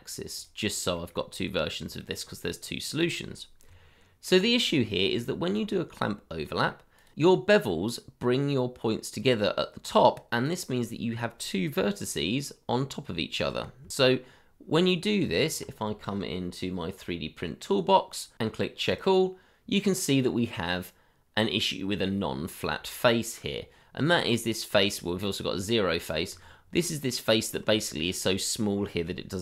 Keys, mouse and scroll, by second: 1.0 shift+middle click, 1.6 middle click, 2.0 shift+middle click, 2.4-3.3 scroll up 1, 3.6 Tab, 4.6-5.0 scroll up 1, 5.2 middle click, 5.7 shift+middle click, 10.8-12.0 scroll up 1, 12.0 g, 13.8 Escape, 14.1-15.2 scroll down 1, 15.2 Tab, 24.1-24.4 scroll up 1, 26.3 Tab, 27.7 shift+middle click, 28.0 scroll up 1.